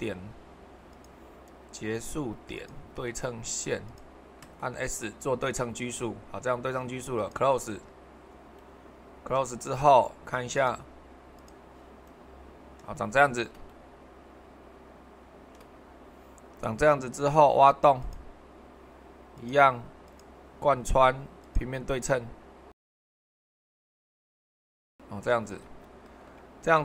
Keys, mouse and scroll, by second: 0.9-2.0 drag, 2.5-3.6 drag, 8.6-10.4 middle drag, 21.4-22.6 drag, 22.8-26.8 drag.